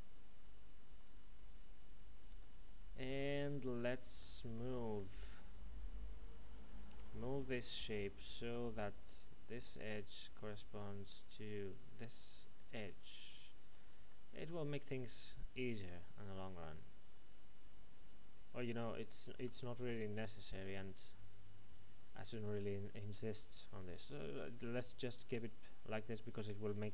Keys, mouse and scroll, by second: 6.9 l, 8.5 click, 14.1 middle click, 19.4 ctrl+z, 19.6 middle click.